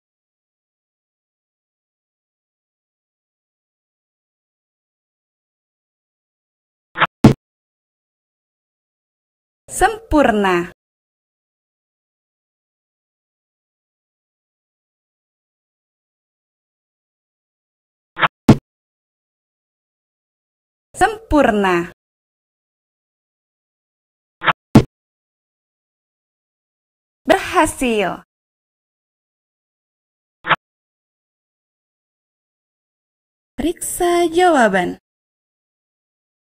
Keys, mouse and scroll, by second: 2.6-3.7 drag, 6.7 click, 18.0 right click, 24.1 right click, 30.0 click, 35.2 click.